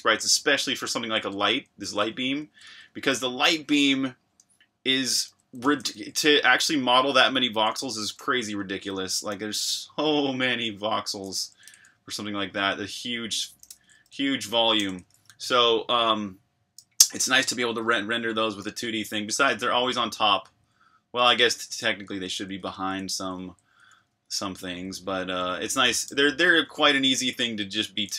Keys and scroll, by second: 0.0-1.2 typing, 5.2-5.9 typing, 7.7-21.2 typing, 23.0-28.1 typing.